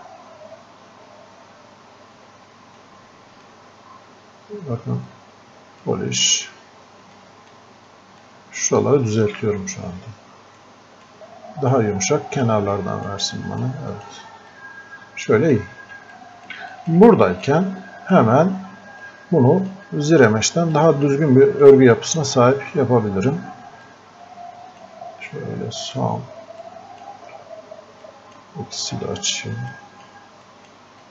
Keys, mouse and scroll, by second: 2.8-7.2 drag, 7.2 click, 7.9-10.6 drag, 10.6 click, 11.2-16.8 drag, 17.6-19.1 drag, 19.1-20.8 drag, 23.9-25.9 drag, 25.9 right click, 26.7-29.0 drag, 29.0 x, 29.7-31.1 drag.